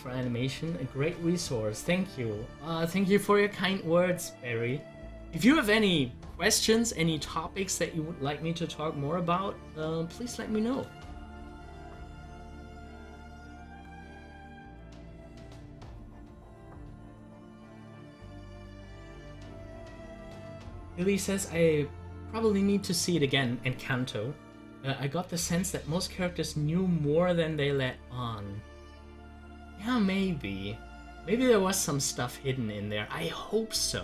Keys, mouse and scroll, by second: 8.9 click, 10.8 scroll up 1, 11.7-14.9 middle drag, 19.0 click.